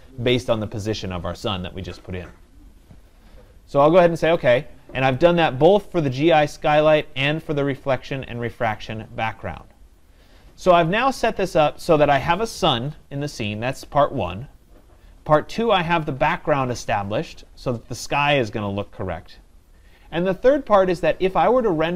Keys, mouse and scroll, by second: 4.4-9.5 drag.